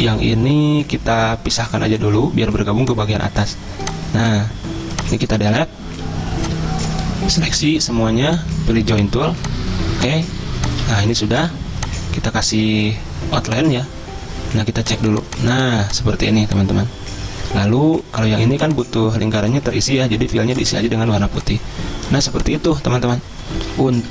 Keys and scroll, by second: 5.6 Delete, 11.5 v, 21.2 z, 22.4 space, 23.9 g.